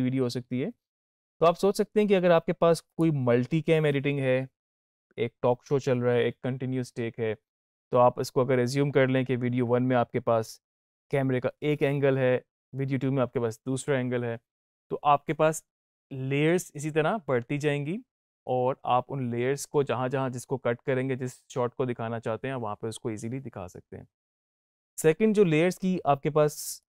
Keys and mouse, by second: 2.7 click, 26.6-26.9 drag.